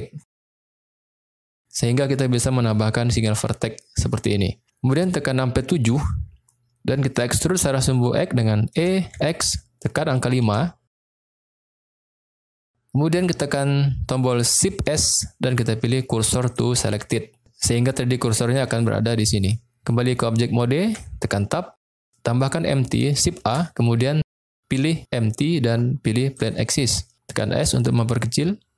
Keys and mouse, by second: 5.8 KP_7, 8.7 e, 9.1 x, 10.4 5, 11.9 Return, 14.8 shift+s, 20.8 Tab, 23.4 shift+a, 27.3 s.